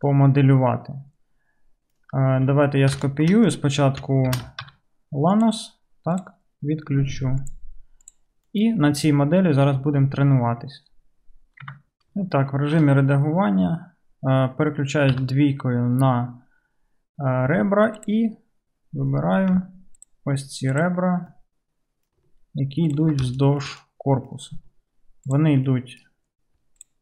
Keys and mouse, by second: 1.7-7.6 right drag, 4.3 shift+d, 7.5 click, 7.5 middle click, 8.5 KP_Decimal, 11.7 Tab, 13.5-19.3 right drag, 15.1 2, 18.0 click, 18.0 middle click, 19.3-23.3 middle drag, 23.3-25.3 shift+right drag, 25.3 ctrl+middle click, 25.4-26.8 ctrl+right drag, 26.8-27.0 ctrl+drag.